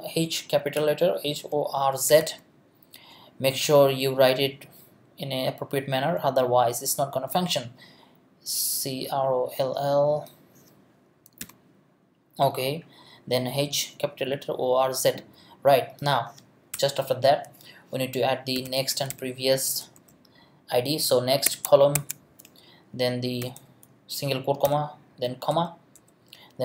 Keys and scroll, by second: 11.4 l, 16.7 Return, 18.3-20.4 typing, 21.4 Tab.